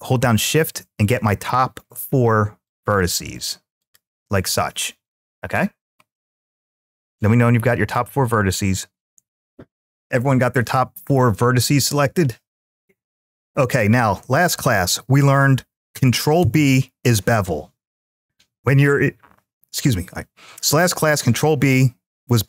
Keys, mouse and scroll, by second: 0.9 shift+click, 2.5 shift+click, 3.6 shift+click, 5.9-7.2 middle drag, 7.5-9.0 scroll up 1, 16.2 ctrl+b.